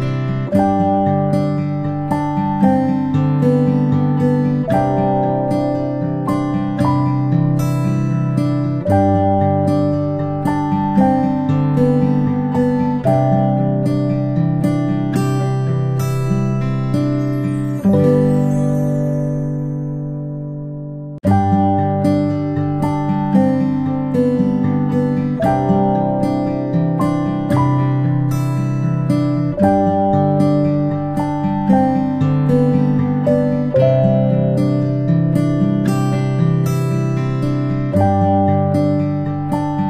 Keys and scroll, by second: 4.7 ctrl+a, 7.6 ctrl+[, 15.3 ctrl+z, 23.2 ctrl+p, 27.3 space, 28.8-36.0 space, 39.5 ctrl+c, 39.6 ctrl+v.